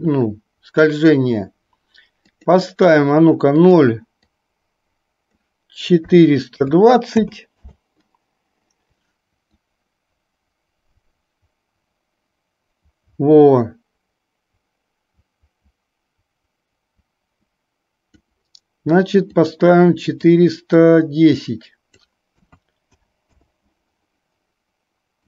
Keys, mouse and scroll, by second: 2.4-7.7 drag, 9.6 click, 19.4-23.5 drag.